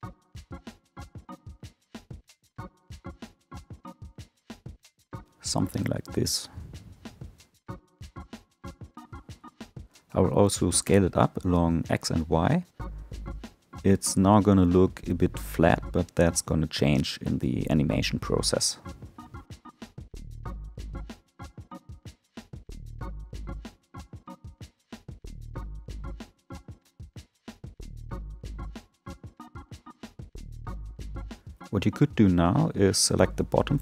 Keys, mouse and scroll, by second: 0.9 s, 3.2 click, 5.2 s, 7.8-8.6 scroll down 4, 8.6 a, 9.7 s, 20.9 Tab, 23.2-23.9 drag, 23.9-24.5 scroll up 2, 24.5-27.5 middle drag, 28.5-30.2 middle drag, 30.2 Tab, 31.4 3, 32.7 alt+click.